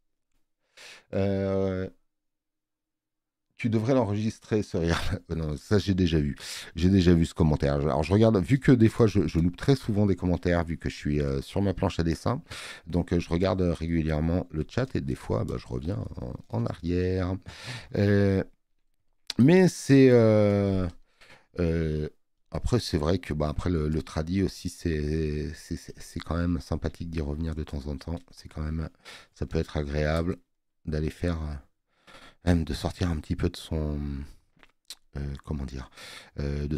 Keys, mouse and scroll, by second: 4.6 space, 5.0 click, 13.4 space, 13.5 click, 24.0 click, 25.4 click, 25.4 space.